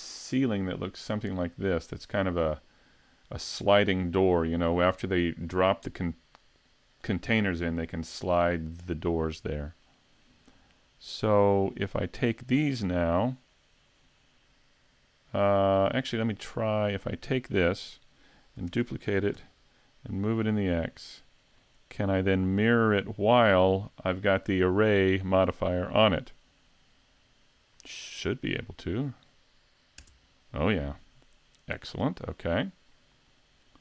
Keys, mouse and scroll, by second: 9.3 middle click, 10.8 right click, 11.8 shift+right click, 17.0 right click, 18.7 shift+d, 21.7 click, 23.5 click, 32.0 right click, 33.7 right click.